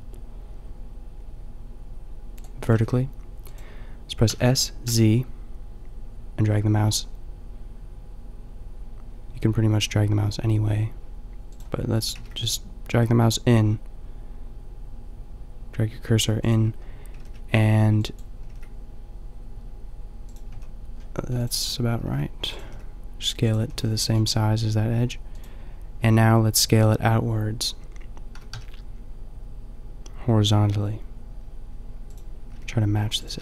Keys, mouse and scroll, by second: 2.7 s, 4.3 s, 11.5-15.4 drag, 12.2 s, 16.5-18.4 drag, 17.2 g, 18.4 g, 20.4-21.0 drag, 20.6 a, 21.0-22.2 middle drag, 22.2 s, 22.6 middle click, 22.6 g, 23.7 a, 28.3 s, 32.5 g, 33.3 s.